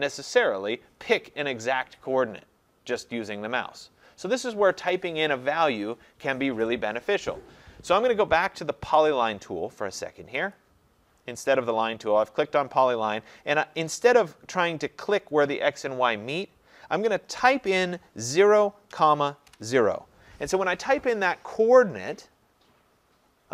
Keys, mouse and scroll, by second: 10.6 click, 18.4-19.5 typing.